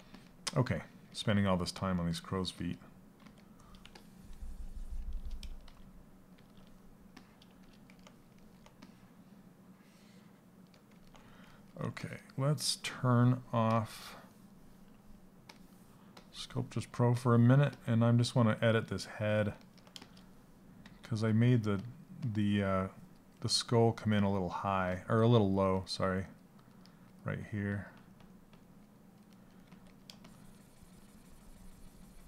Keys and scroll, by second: 5.2 shift+f, 5.9 shift+f, 17.3 s, 20.3 s, 29.2 s.